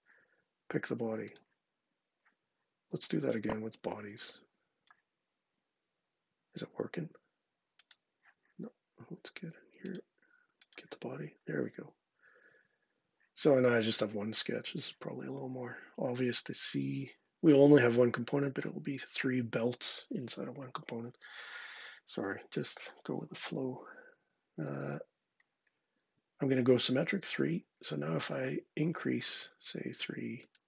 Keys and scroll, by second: 23.1 1, 23.9 Tab, 24.3 Tab.